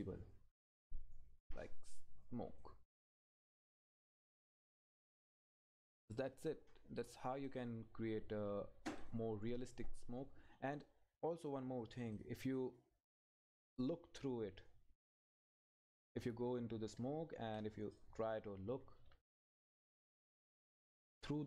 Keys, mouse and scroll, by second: 9.6-10.3 scroll up 1, 12.0 click, 15.3 Right, 15.6 Up.